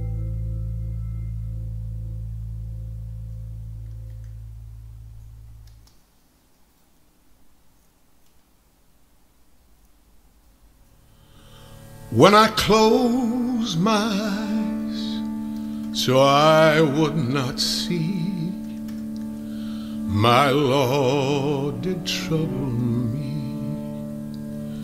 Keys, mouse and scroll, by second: 0.0-1.6 middle drag, 0.0-0.3 scroll, 1.6-4.1 drag, 4.1 Left, 5.3 click, 5.5 scroll, 6.1 click, 6.7 scroll, 6.9-8.3 middle drag, 8.3 t, 10.9-15.4 drag, 15.2-16.2 typing, 17.5-18.5 drag, 18.3-19.2 typing, 20.0 ctrl+z, 20.3 ctrl+z, 21.1 click, 22.2 click.